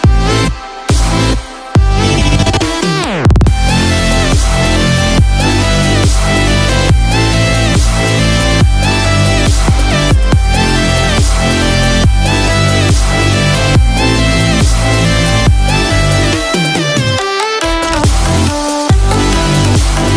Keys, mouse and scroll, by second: 0.1 click, 1.0-3.1 scroll up 1, 3.1 click, 4.9 Tab, 6.4 scroll down 1, 6.7-7.3 scroll up 2, 7.3 Tab, 8.9 click, 14.5-14.9 scroll down 1.